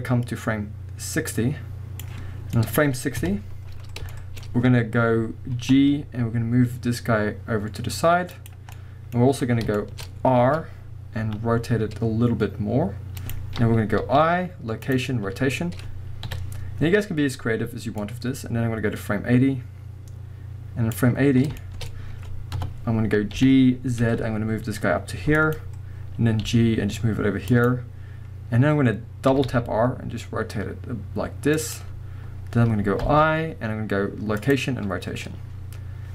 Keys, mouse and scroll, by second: 2.3 scroll down 2, 2.6 middle click, 3.2 KP_1, 3.8 scroll up 1, 3.9-5.1 shift+middle drag, 4.4 scroll up 1, 5.7 g, 8.5 click, 8.7 middle click, 9.4-13.3 middle drag, 9.4-9.8 scroll down 1, 10.5 r, 13.3 click, 14.0 i, 15.0 i, 15.5-16.3 scroll down 1, 16.3 KP_1, 16.9 scroll up 1, 18.0-21.6 drag, 21.6-25.5 shift+middle drag, 21.9-22.6 scroll up 2, 22.6 KP_0, 23.4 g, 25.5 click, 26.4 g, 27.6 click, 29.3 r, 31.7 click.